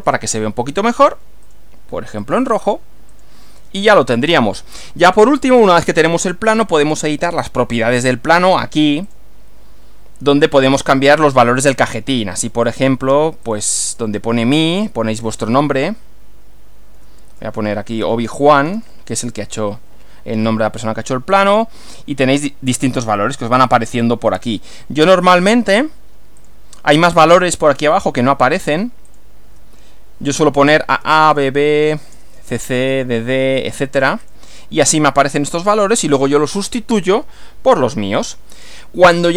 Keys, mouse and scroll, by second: 0.0 click, 1.4 click, 2.2 click, 3.2 click, 6.8 click, 8.4 click, 9.1 click, 10.3 click, 12.6 click, 13.4 click, 16.9 Up, 17.5-19.1 typing, 19.7 Delete, 21.3 click, 25.4 click, 26.4 click, 27.4 click, 28.6 a, 29.1 click, 29.4 a, 30.6 Return, 30.9 b, 31.2 Return, 32.1 BackSpace, 32.4 c, 32.6 Return, 32.9 d, 34.2 click.